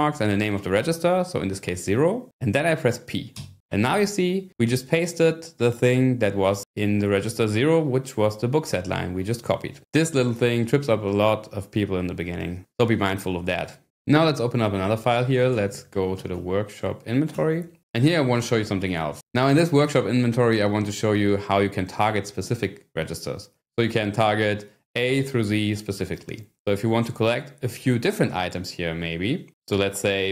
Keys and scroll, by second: 0.6 0, 3.3 p, 15.0-17.7 typing.